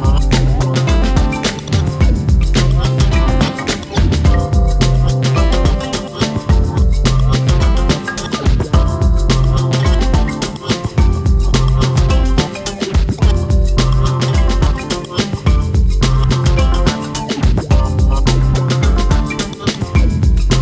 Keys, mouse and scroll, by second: 0.4 click, 0.7 click, 1.4-2.7 drag, 3.4 click, 4.4 click, 5.6-6.4 middle drag, 6.4 click, 7.5 click, 9.0 click, 10.3 click, 11.2 click, 12.0 click, 13.5 click, 13.9-14.2 scroll down 1, 14.2-16.2 middle drag, 17.2-17.6 scroll down 1, 17.6 middle click, 17.8-18.9 scroll up 4, 18.0 shift+middle click, 18.9 click.